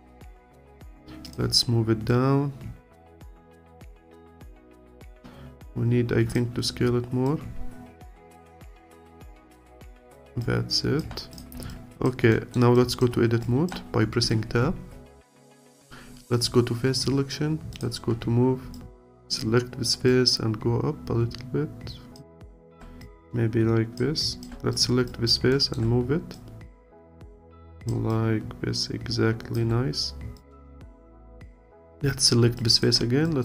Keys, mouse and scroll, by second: 4.0-7.3 alt+drag, 10.1 click, 10.4 alt+click, 11.7 alt+click, 12.3 alt+middle click, 12.7-14.7 alt+drag, 14.7 Tab, 17.7-19.5 drag, 20.1 click, 22.4 alt+click, 24.2 alt+click, 25.1 alt+click, 25.5 alt+middle click, 26.3 click, 28.1-30.5 alt+drag, 31.7 alt+click, 32.6 alt+click.